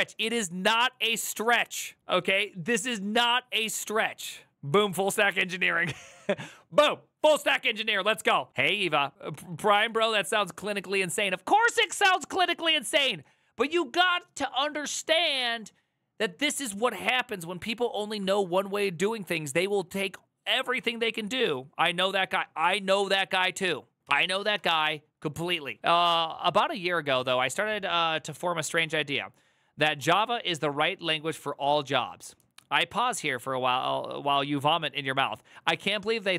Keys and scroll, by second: 4.5 alt+[, 9.5 alt+[, 24.0 alt+[.